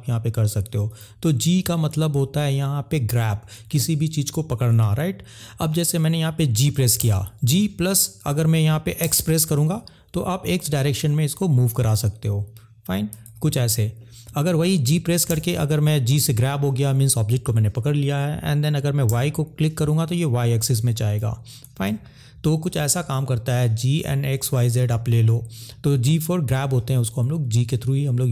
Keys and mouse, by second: 2.2 ctrl+z, 7.0 g, 9.0 x, 11.8 click, 13.3 ctrl+z, 15.3 g, 19.0 y, 21.1 click, 21.9 ctrl+z, 25.8 middle click.